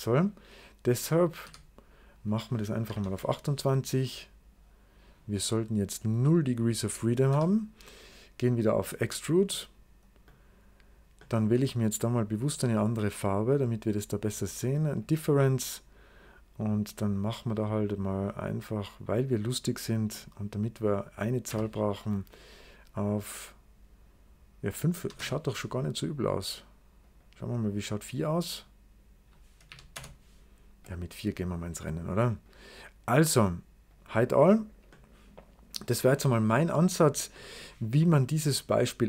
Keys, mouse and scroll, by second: 1.1 click, 1.3 d, 2.4-3.3 typing, 5.8 click, 7.2 w, 8.6 click, 9.4 right click, 10.1 middle click, 11.2-12.3 middle drag, 12.3 click, 13.5 click, 14.8 click, 16.7-18.6 drag, 20.0-21.0 middle drag, 21.0 click, 21.4 d, 24.9 typing, 25.0 Return, 26.9 click, 27.7 click, 28.3 click, 28.4 click, 29.5 4, 29.8 Return, 30.7 click, 32.3 click, 33.7 click, 35.0-35.7 scroll down 2, 35.7 right click.